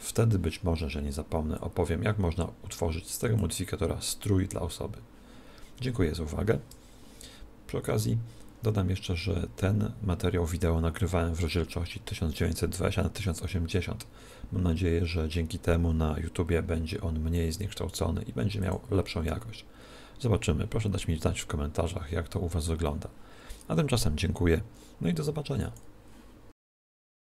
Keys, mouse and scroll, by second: 1.7 click, 18.7 click.